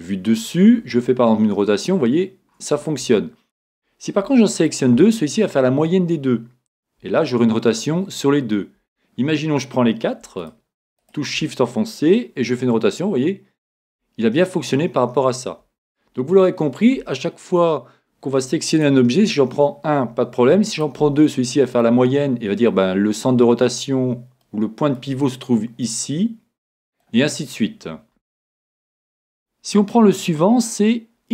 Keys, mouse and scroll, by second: 0.9 r, 4.6 right click, 7.0 r, 10.4 right click, 12.4 r, 16.4-19.1 middle drag, 18.7 right click, 20.7 right click, 21.2 middle click, 21.4 click, 21.8-23.6 middle drag, 24.6-26.0 middle drag, 26.2-27.7 middle drag, 29.3-31.2 drag.